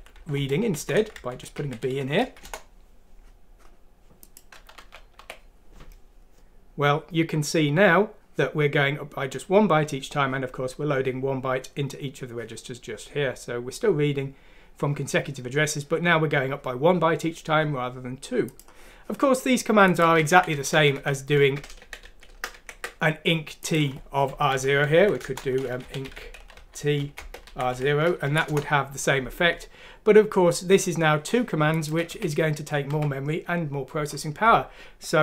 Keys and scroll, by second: 0.6-1.5 typing, 2.1 F6, 2.4 Return, 4.7-5.1 typing, 20.3 ctrl+z, 20.5 ctrl+z, 20.7 ctrl+z, 20.9 ctrl+z, 21.8 ctrl+z, 22.0 ctrl+z, 22.5 ctrl+z, 25.0 End, 25.2 Return, 25.5-27.7 typing, 28.2 F6, 28.5 Return, 32.1-32.9 typing.